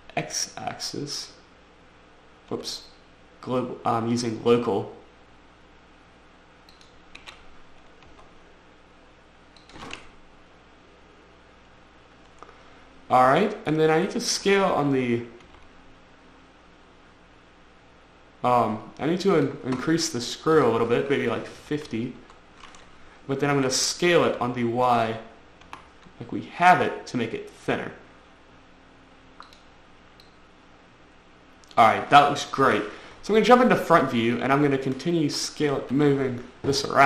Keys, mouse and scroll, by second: 0.0 x, 2.9 x, 7.1 click, 8.4 y, 9.9 click, 10.3 middle click, 14.4 middle click, 14.7 middle click, 15.1 middle click, 15.8 y, 19.7 click, 20.9 click, 21.9 typing, 22.5 Return, 23.9 s, 24.7 y, 26.0 y, 29.8 click, 30.6 click, 33.0 1, 34.7 click, 36.2 5.